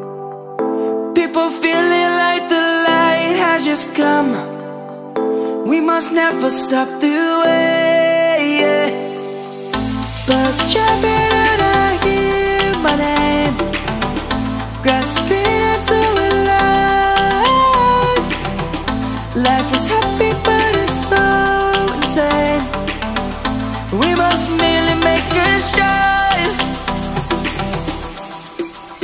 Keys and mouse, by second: 0.2 click, 2.3 shift+a, 8.3 click, 9.7 middle click, 10.9 s, 14.8 ctrl+1, 16.5 shift+middle click, 17.4 click, 22.9 shift+middle click, 24.5 g, 27.1 click.